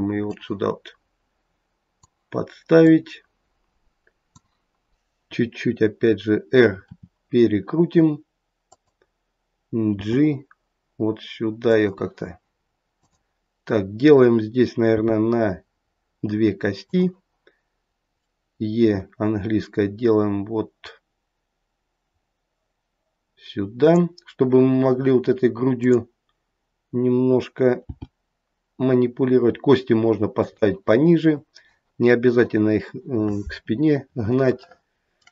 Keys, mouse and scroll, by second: 0.2 click, 2.8 click, 6.9 r, 14.9 click, 14.9 g, 18.8 e, 25.8 click, 27.9 g, 34.0 scroll up 2, 34.6 shift+middle click, 35.2 shift+middle click.